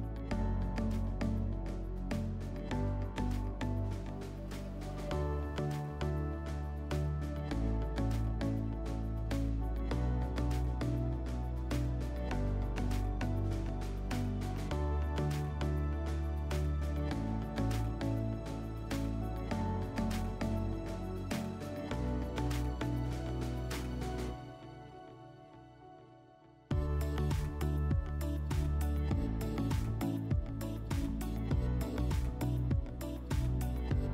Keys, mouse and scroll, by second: 0.6 alt+middle click, 8.3 click, 11.5 right click, 14.8 click, 19.5 click, 20.8 click, 21.7 ctrl+click, 21.9 ctrl+click, 23.8 alt+middle click, 26.7 click, 32.2 click, 33.6 right click.